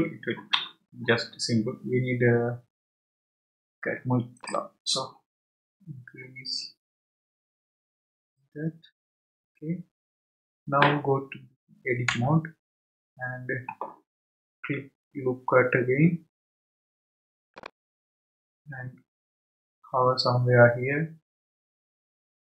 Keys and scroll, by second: 12.1 Tab.